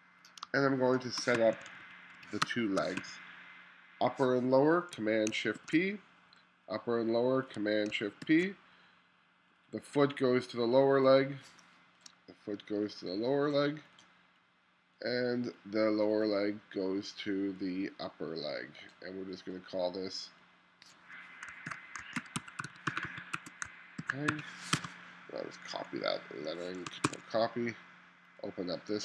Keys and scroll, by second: 0.5 space, 1.4 2, 2.5 space, 3.0 2, 11.7 space, 22.0-25.3 typing, 27.1 super+c.